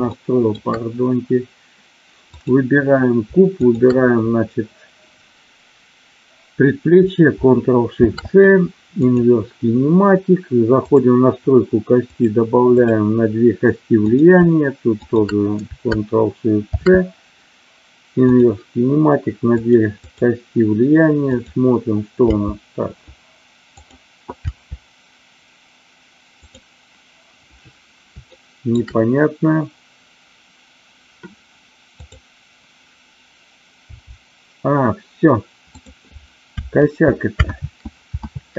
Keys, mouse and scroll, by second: 0.1 shift+middle drag, 2.3 click, 3.6 shift+click, 9.1 ctrl+shift+c, 10.9 click, 12.1 click, 12.8 click, 15.0 shift+click, 16.6 ctrl+shift+c, 19.5 click, 20.0 click, 22.2 g, 23.8 click, 24.4 g, 26.4 click, 28.3 shift+middle click, 34.0 g, 36.9 ctrl+z, 37.5 ctrl+z, 38.2 ctrl+z.